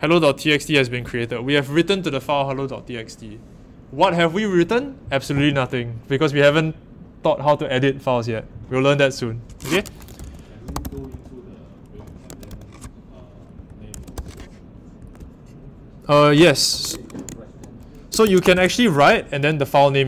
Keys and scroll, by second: 9.8-12.5 typing, 13.5-14.6 typing, 15.1 super+w, 17.9-18.9 typing.